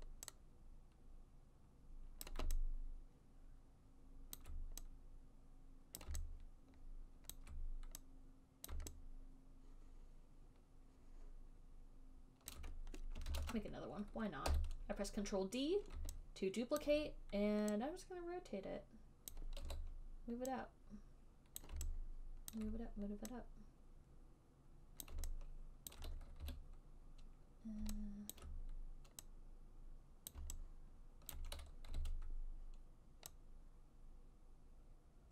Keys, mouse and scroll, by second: 2.6 click, 4.7 alt+click, 6.3 click, 7.6 alt+click, 9.0 click, 12.8 alt+click, 13.6 ctrl+d, 14.8 e, 17.1 alt+click, 19.5 click, 20.0 w, 21.8 click, 22.8 alt+click, 25.3 click, 26.2 alt+click, 26.7 e, 28.7 alt+click, 30.6 click, 31.6 click, 31.8 alt+click, 32.2 r.